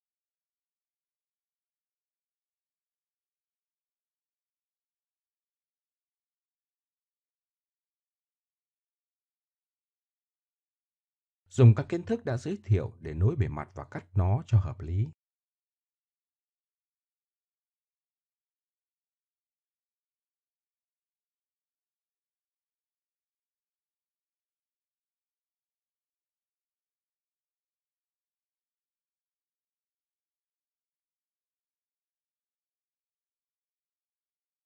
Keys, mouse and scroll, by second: 0.5-1.7 drag, 1.7 middle click, 3.0 w, 4.1 g, 5.1 click, 5.9 w, 7.0 g, 7.6 middle click, 8.1 g, 8.6 click, 8.9 click, 9.8 click, 15.3 f, 16.1-16.4 middle drag, 17.2 middle click, 20.1 w, 20.3 Escape, 21.1 f, 22.1-22.5 right drag, 22.6 f, 22.8 ctrl+z, 24.1 f, 25.8-27.8 typing, 26.3 middle click, 27.0 right click, 27.1 right click, 27.4 Escape, 28.0 middle click, 28.2 middle click, 29.0 right drag, 29.1 g, 30.1 k, 31.0 g, 31.6 click, 32.2 middle click, 32.6 click, 32.8 alt+m, 34.0 k.